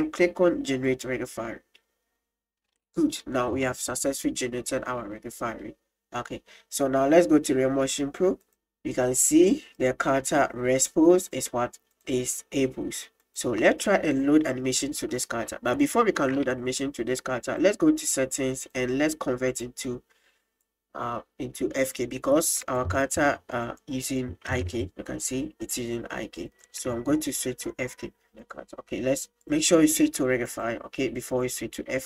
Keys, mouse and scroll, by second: 0.9-2.0 drag, 3.9-5.6 middle drag, 8.4 click, 9.8 right click, 11.3 click, 13.7-15.1 middle drag, 15.9 shift+middle drag, 17.5 click, 18.6 click, 19.5 click, 20.6-22.0 drag, 22.7 right click, 23.1 right click, 23.7 right click, 24.1 right click, 24.5 g, 28.3 r, 29.4-30.7 drag, 31.4 click.